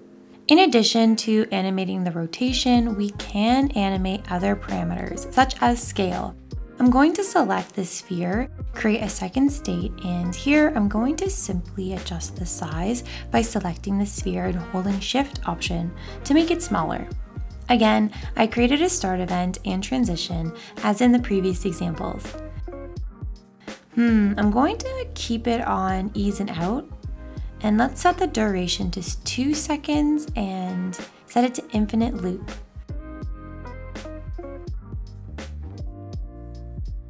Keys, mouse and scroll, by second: 31.3 2.